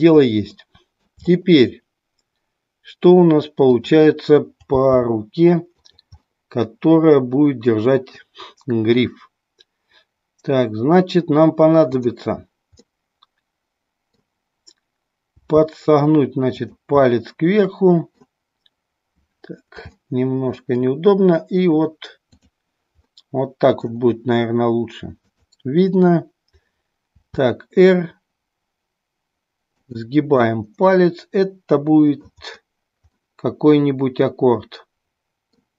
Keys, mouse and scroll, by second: 0.6-1.1 middle drag, 3.7 click, 5.0 g, 6.0 click, 6.3-8.2 middle drag, 12.0-13.3 drag, 13.4-14.3 middle drag, 15.5 g, 16.7 click, 17.2-18.3 middle drag, 20.2 middle click, 22.3 click, 23.2 middle click, 25.3-26.6 drag, 27.2 r, 29.8 click, 30.4-32.2 middle drag, 33.1 middle click, 33.6-35.4 middle drag.